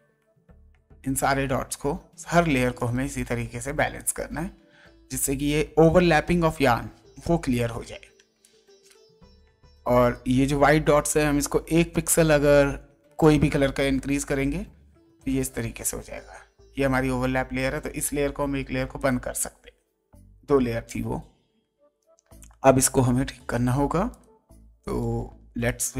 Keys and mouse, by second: 2.8 ctrl+right click, 3.9 ctrl+click, 4.9 ctrl+Up, 8.1 space, 8.4 click, 10.1 ctrl+right click, 11.0 ctrl+click, 11.9 ctrl+Up, 15.9 ctrl+z, 18.9 click, 23.5 ctrl+right click, 24.1 ctrl+click, 24.8 ctrl+right click, 25.6 ctrl+click.